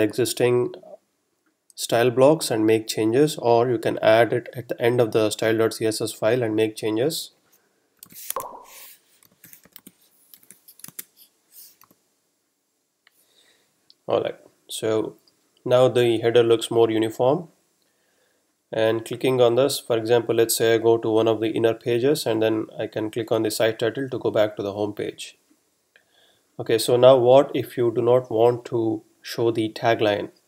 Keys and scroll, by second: 7.8-9.6 typing, 10.8 super+s, 11.0 super+Tab, 11.8 super+r.